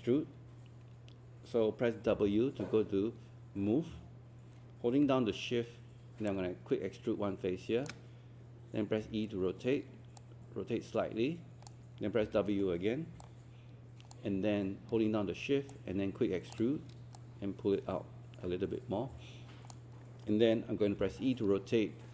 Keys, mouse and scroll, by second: 2.1 w, 6.3-7.9 shift+drag, 9.0 e, 10.2 click, 12.2 w, 13.2 alt+click, 15.7 shift+click, 17.2-19.8 drag, 21.0 e.